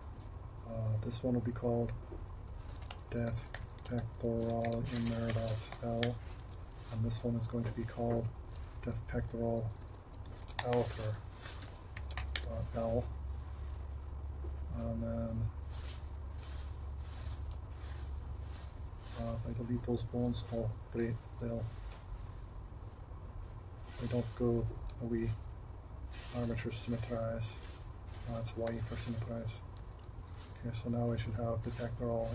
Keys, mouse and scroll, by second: 3.6-5.6 drag, 5.1 n, 6.4 super+c, 9.7 BackSpace, 9.9 BackSpace, 10.8-12.2 drag, 11.2 BackSpace, 15.9 click, 27.6-29.6 drag, 29.8 alt+a.